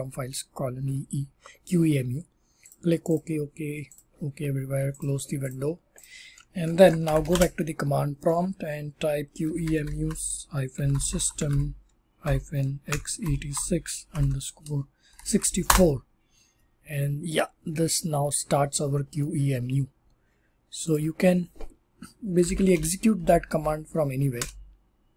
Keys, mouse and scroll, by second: 4.9 click, 5.4 click, 5.9 click, 6.7-7.6 typing, 8.9-15.6 typing, 20.5 typing, 20.9 click, 22.1-23.1 typing, 24.3 Up.